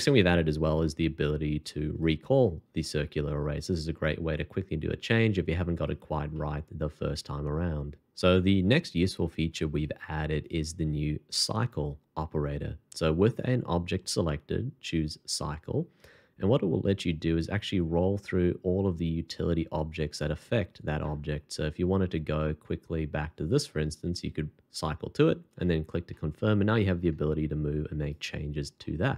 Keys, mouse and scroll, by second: 0.7 shift+2, 3.9 r, 4.4 r, 6.3 middle click, 11.3 shift+2, 16.6 scroll up 1, 26.1 middle click, 28.0 right click, 28.8 middle click.